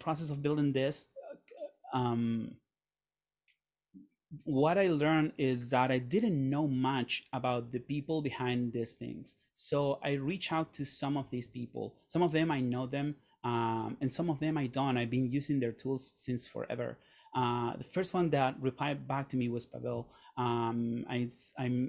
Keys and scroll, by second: 9.7 Right.